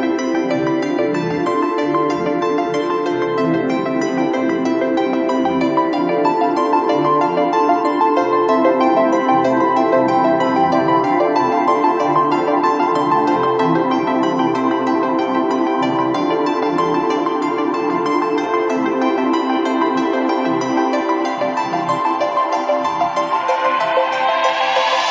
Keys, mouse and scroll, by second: 2.3 space, 2.5 click, 2.6 space, 5.4 click, 7.5 space, 7.8 click, 8.0 [, 8.3 click, 8.4 [, 8.5 click, 9.4 ], 9.5 click, 9.6 click, 10.1 scroll up 1, 10.2 click, 12.6-13.0 scroll down 1, 13.4 space, 13.4 click, 13.6 space, 14.6 click, 16.0 ctrl+scroll up 1, 17.3-18.1 scroll up 1, 18.1 click, 25.0 click.